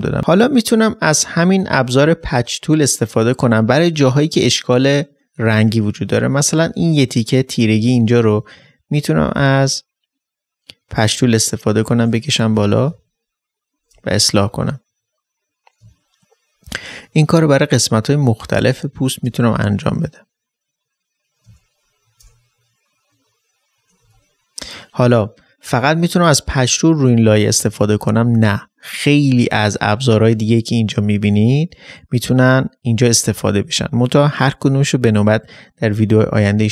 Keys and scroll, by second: 0.2 ctrl+space, 12.3 ctrl+space, 12.9 ctrl+d.